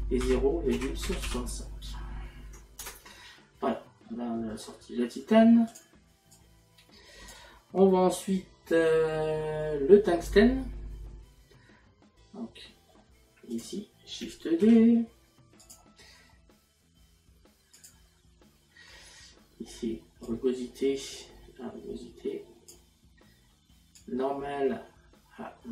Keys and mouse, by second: 4.1 middle click, 5.7 click, 12.4 middle click, 13.6 click, 17.8 click, 20.3 click, 24.1 click.